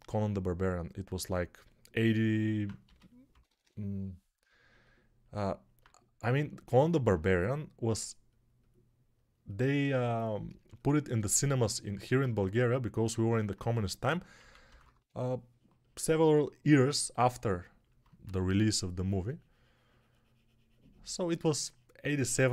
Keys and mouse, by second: 2.7 g, 3.2 ], 3.3 ], 3.5 ], 12.0 1, 14.3 p, 14.5 ], 14.7 ], 14.8 ], 18.1 3.